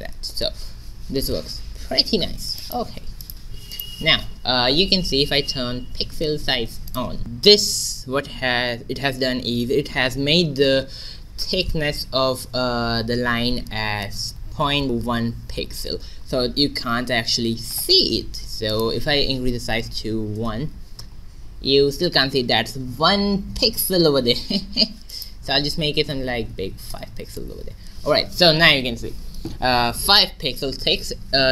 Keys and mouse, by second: 0.5 middle click, 2.6-5.3 middle drag, 5.3 click, 6.9-11.5 drag, 18.8-20.7 drag, 25.2-27.2 drag.